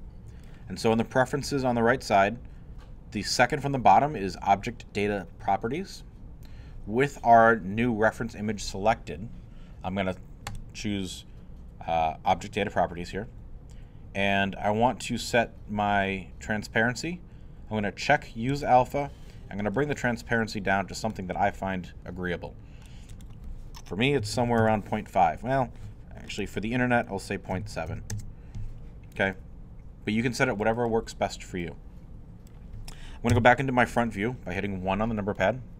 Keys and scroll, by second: 24.3 5, 24.6 Home, 27.9 7, 28.1 Home, 33.3 i.